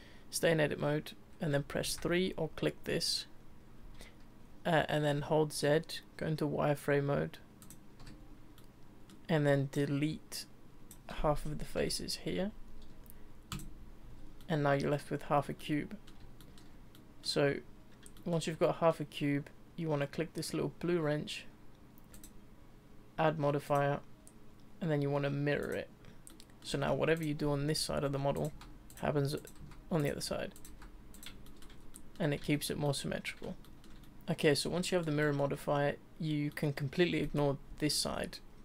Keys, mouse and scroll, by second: 1.8 3, 5.2 z, 8.6-9.7 middle drag, 9.7 click, 11.8 Delete, 14.0 z, 14.4 middle click, 15.2 Tab, 15.6-21.7 middle drag, 22.1 click, 23.6 click, 25.7-26.3 drag, 26.3-26.8 middle drag, 26.8 Tab, 27.1 click, 28.0-30.7 typing, 31.4 shift+middle click, 31.7 scroll down 2, 31.9-35.5 middle drag, 35.5-36.5 scroll up 2, 36.5-38.6 middle drag.